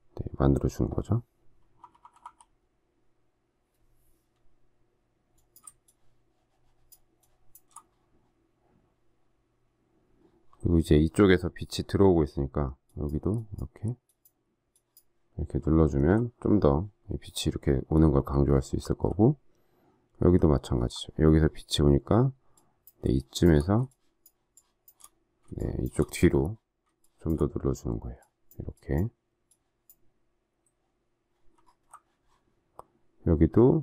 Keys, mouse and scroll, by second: 1.7-2.1 typing, 5.8 shift+click, 7.1 shift+click, 15.7 alt+scroll down 1, 18.3 alt+scroll up 1, 20.4 alt+scroll up 1, 23.1 shift+click, 23.8 shift+click, 24.5 shift+click, 25.5 shift+click, 26.9 shift+click, 31.5 alt+scroll down 1.